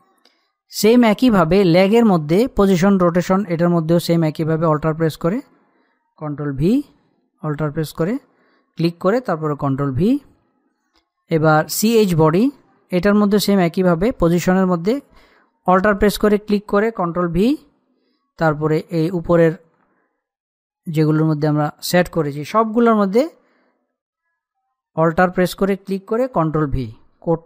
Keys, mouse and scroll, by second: 0.2-2.2 scroll up 1, 2.3 click, 5.1 alt+Num_Lock, 5.1 click, 7.4 ctrl+v, 8.5 alt+click, 10.4 ctrl+v, 11.4 click, 12.8-14.1 scroll up 1, 16.6 alt+click, 18.1 ctrl+v, 22.0 alt+click, 23.4 ctrl+v, 25.6 alt+click, 27.1 ctrl+v.